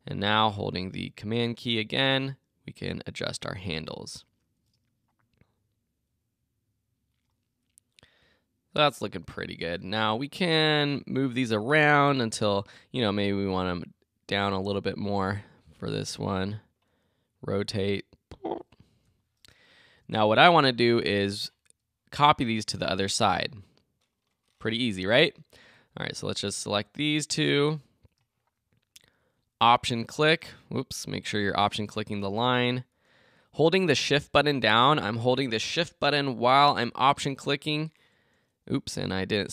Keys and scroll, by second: 15.1 Down, 18.9 Return.